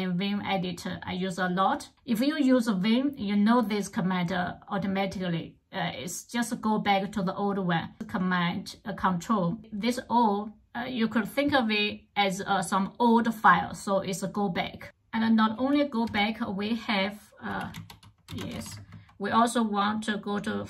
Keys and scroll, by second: 14.8-18.8 typing.